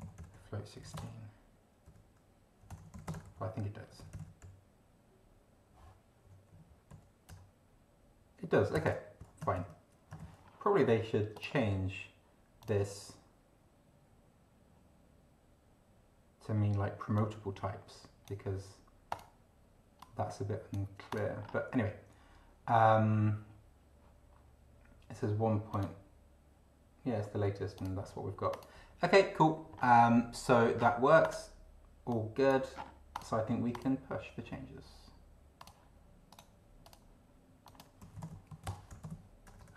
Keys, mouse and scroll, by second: 0.0 ctrl+d, 0.2 ctrl+t, 0.4 ctrl+y, 0.8 ctrl+p, 1.0 ctrl+space, 1.9-4.9 typing, 6.2 6, 6.5 4, 6.9 End, 7.2 Return, 8.7 Return, 9.5 ctrl+d, 10.2 ctrl+d, 11.3 click, 12.6 click, 17.2-18.4 drag, 19.1 click, 20.0 click, 21.1 click, 21.4 scroll up 1, 25.7 click, 27.8 click, 28.5 click, 29.7 scroll up 2, 30.8 scroll down 2, 31.2 click, 32.1 click, 33.1 click, 33.7 click, 35.6 click, 36.4 click, 36.8 click, 37.7 click, 37.8-39.7 typing, 37.9 click.